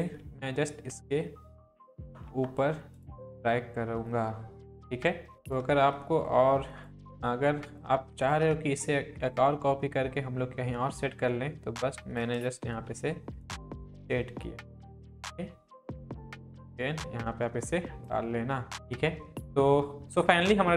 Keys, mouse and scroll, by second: 0.2 Down, 1.1 Right, 1.8 Up, 2.6 Right, 3.0 click, 8.2 shift+click, 8.6-12.4 alt+drag, 12.7 ctrl+t, 13.4-14.1 drag, 18.7 Down, 19.4 click.